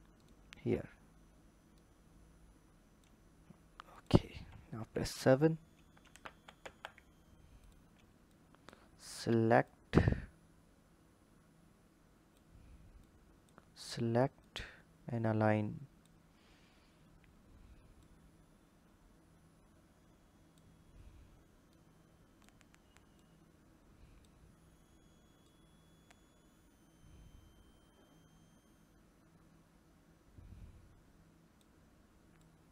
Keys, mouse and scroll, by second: 1.6 click, 3.7 click, 4.6 KP_7, 5.0-6.0 scroll down 2, 6.0 ctrl+z, 6.4 ctrl+z, 7.4 click, 8.1 click, 9.5 drag, 12.8 click, 14.2 click, 16.0-16.8 scroll up 4, 16.8-17.8 scroll up 3, 17.8 click, 21.5-23.1 drag, 32.2 click.